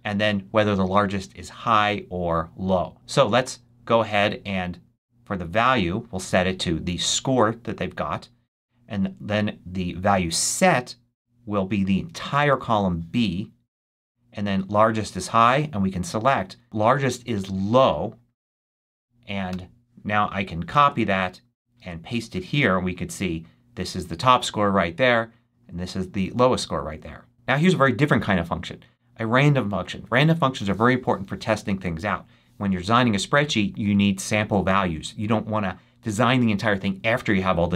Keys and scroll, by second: 19.4 Return, 20.1 super+Return, 20.7 super+c, 21.7 super+v.